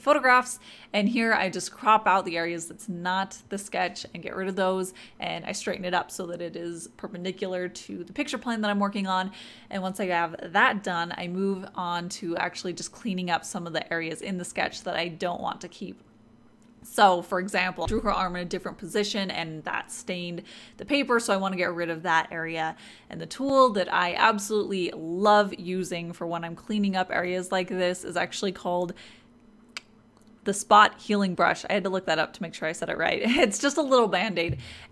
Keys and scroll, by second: 0.5-2.9 typing.